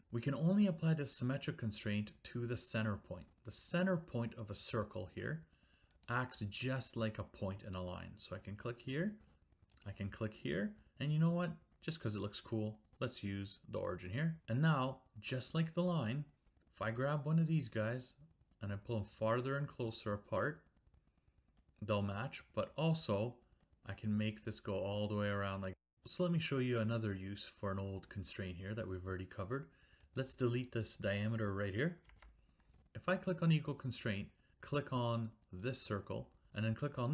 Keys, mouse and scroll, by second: 6.0 click, 9.8 click, 14.2 click, 15.9 Escape, 30.1 click, 32.1 Delete, 33.5 click, 35.7 click.